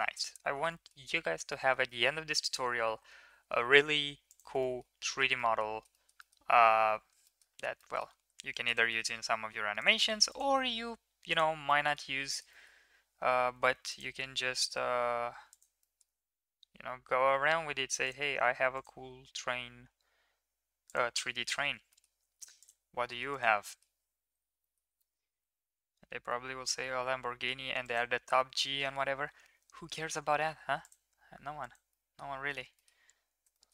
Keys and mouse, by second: 0.8 middle click, 1.6 shift+middle click, 3.0 e, 4.7 middle click, 5.5 middle click, 5.9 shift+middle drag, 6.2 middle click, 7.3 middle click, 7.9 middle click, 8.4 ctrl+r, 10.1 ctrl+r, 11.6 middle click, 12.5 middle click, 13.6 ctrl+r, 15.9 middle click, 17.0 g, 18.5 ctrl+r, 22.3 ctrl+r, 24.7 middle click, 24.9 g, 30.0 ctrl+r, 32.0 middle drag, 33.6 shift+middle click.